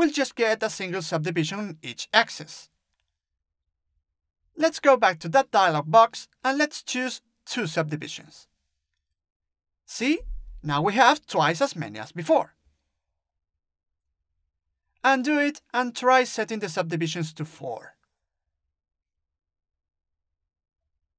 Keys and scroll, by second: 0.3 ctrl+z, 7.4 2, 18.1 4.